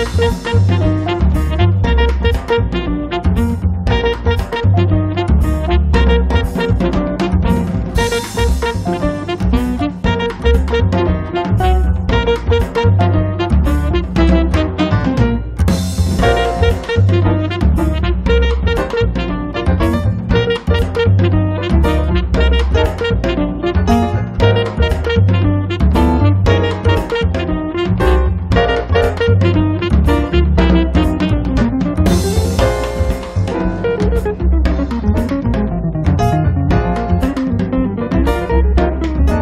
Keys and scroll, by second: 0.9 Delete, 1.9-3.9 typing, 8.6 space, 10.4 Delete, 12.6 Delete, 23.1 r, 26.8 f, 28.1 1, 28.5 5, 28.9 Return, 30.9 space, 31.8 Delete, 34.4 r, 37.9 p.